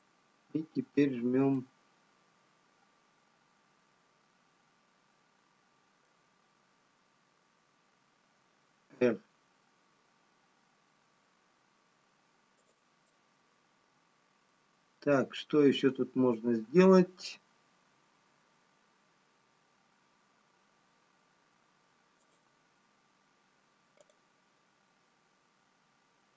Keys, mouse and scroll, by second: 0.5 s, 2.0 middle click, 9.1 r, 13.5 middle click, 18.4 s, 24.4 click.